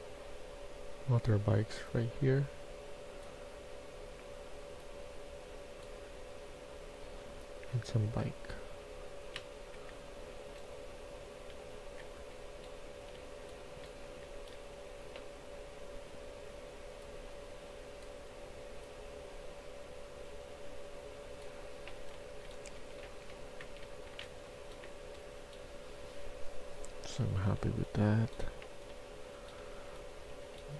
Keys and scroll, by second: 9.1-14.1 typing, 21.3-25.3 typing, 22.6 Escape, 26.9-27.6 typing, 28.8-30.7 typing.